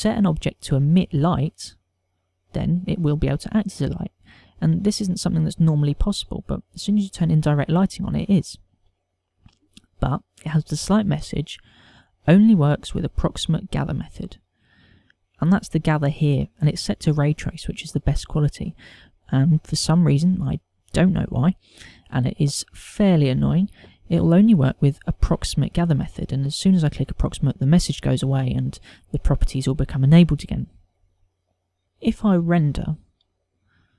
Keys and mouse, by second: 26.6 click.